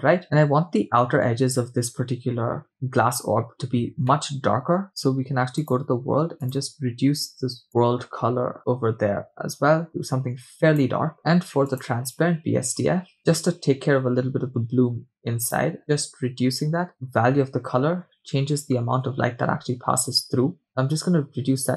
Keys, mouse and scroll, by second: 0.2 space, 2.7 click, 3.8 scroll down 2, 4.1-4.9 middle drag, 4.9 scroll down 1, 5.6 click, 6.4 click, 11.7 click, 15.5 click.